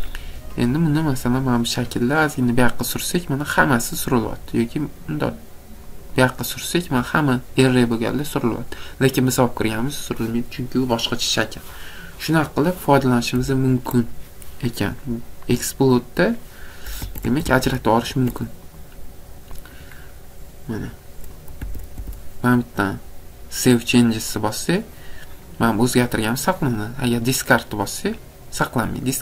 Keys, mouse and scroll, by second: 0.8 click, 0.9-1.5 scroll, 1.5 click, 2.6 click, 2.8 scroll, 6.0 click, 6.4-7.3 scroll, 13.7 Escape, 14.1-15.0 scroll, 15.5-16.6 scroll, 17.0 Escape, 17.2 Escape, 17.5 Escape, 17.7 scroll, 18.1 Escape, 18.8 click, 19.7 click, 20.0 scroll, 20.8 scroll, 21.7 Escape, 22.0 Escape, 25.2-25.7 scroll, 25.7 click, 26.0 click, 28.3 scroll, 28.8 click.